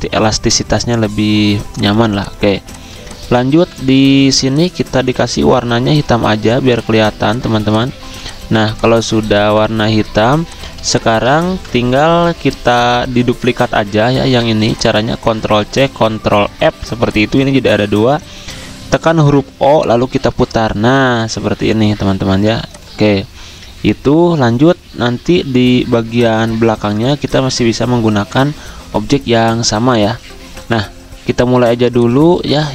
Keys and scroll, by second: 2.5 z, 3.5 v, 4.9-5.6 typing, 8.0-11.4 typing, 15.3 ctrl+c, 16.5 ctrl+f, 17.7 ctrl+z, 18.8 o, 22.3 v.